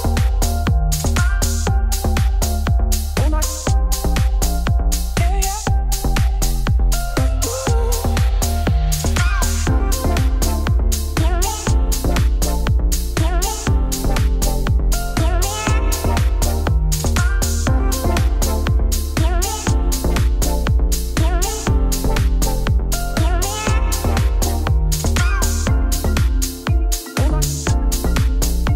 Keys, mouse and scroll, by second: 1.4 middle click, 2.2 g, 4.3-5.5 middle drag, 7.4 click, 7.6 click, 7.8 middle click, 8.0 g, 10.1-11.3 middle drag, 14.7-15.9 middle drag, 16.0 middle click, 16.3 2, 17.1 click, 18.8 middle click, 19.1 scroll down 3, 19.4 middle click, 20.0 KP_Divide, 20.3 scroll down 1, 20.5 middle click, 20.8 scroll up 2, 21.0 g, 22.0 KP_3, 22.5 e, 25.9 scroll up 2, 26.0 g, 26.6 middle click, 26.8 scroll down 3, 27.0 middle click, 27.4 Tab, 27.5 middle click, 28.0 shift+a.